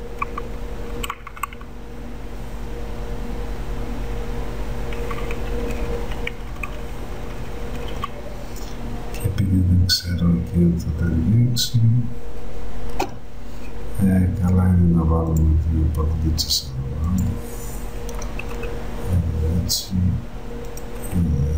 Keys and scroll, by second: 4.8 Right, 18.5 space.